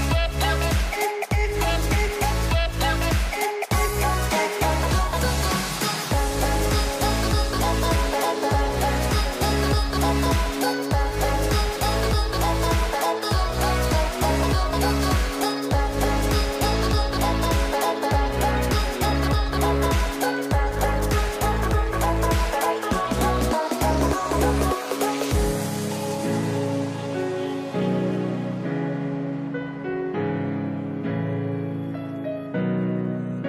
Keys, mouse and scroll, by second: 1.1 s, 2.6 e, 4.2 s, 5.8 click, 7.4-9.1 right drag, 9.1 Delete, 10.7 c, 12.3 Delete, 14.0 c, 17.4-19.2 middle drag, 19.2 c, 21.0 c, 22.8 Delete, 24.6 c, 26.4-28.3 middle drag, 28.3 click, 30.1 Delete, 32.0 click.